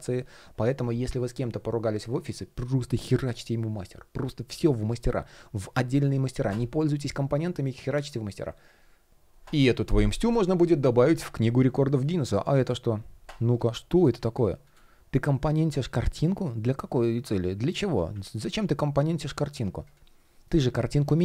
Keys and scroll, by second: 13.0 shift+2, 20.0 shift+p.